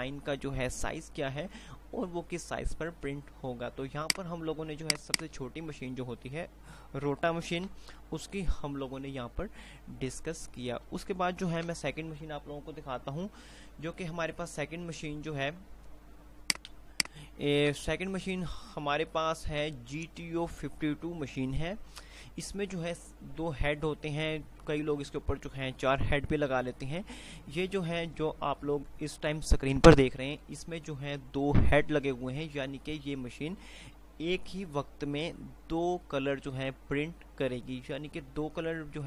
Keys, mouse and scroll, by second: 5.2-7.7 drag, 7.7 shift+F2, 11.7 Page_Up, 16.7 Page_Up, 16.9 click, 17.9 Page_Down.